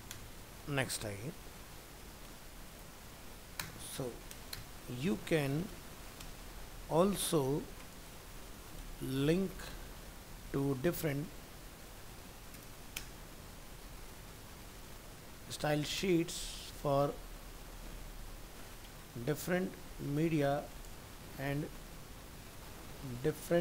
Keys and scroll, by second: 0.6 ctrl+s.